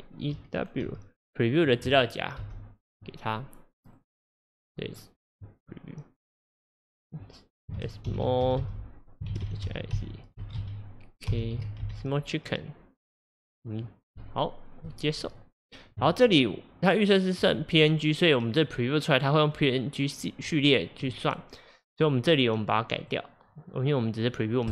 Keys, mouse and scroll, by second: 23.1-24.7 drag.